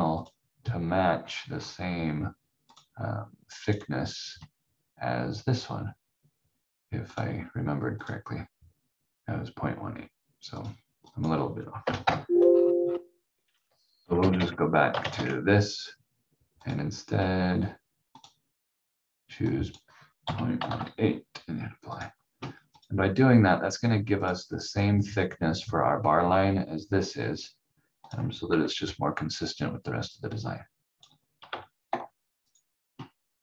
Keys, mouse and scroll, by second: 0.7 scroll down 1, 1.2-2.7 scroll up 1, 2.7 click, 7.1 click, 11.8 Delete, 12.4-13.0 scroll down 1, 13.6 ctrl+z, 14.0 ctrl+z, 14.3 ctrl+z, 14.9 ctrl+shift+z, 16.7 click, 20.2 ., 20.5 1, 21.9 click, 23.0 v, 24.2 click, 28.0 click, 28.5 F4, 30.1 click, 31.8 shift+F2, 32.5 click.